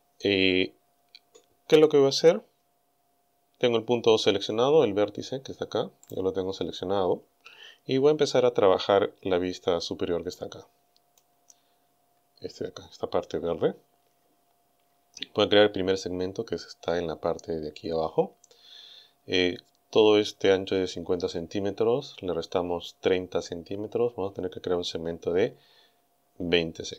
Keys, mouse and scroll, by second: 6.1 right click, 9.2-10.2 scroll up 4, 10.4 click, 12.0-12.3 scroll down 1, 13.7 scroll down 1.